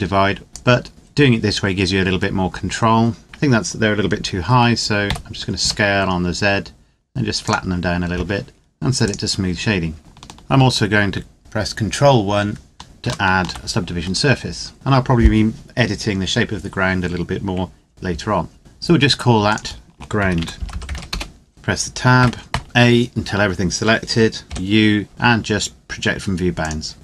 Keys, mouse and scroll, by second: 0.5 click, 3.2 Tab, 4.9 s, 5.5 z, 7.3 click, 12.9 ctrl+1, 17.8 KP_7, 19.2 click, 19.9-20.7 typing, 20.9 Return, 21.5 Tab, 21.9 a, 22.2 a, 24.4 u, 26.4 click, 26.9 Tab.